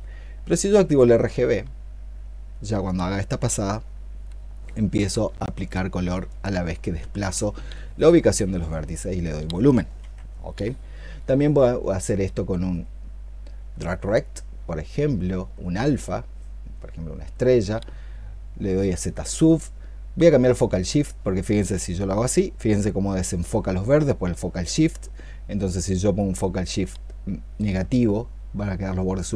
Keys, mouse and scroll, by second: 9.9 ctrl+z.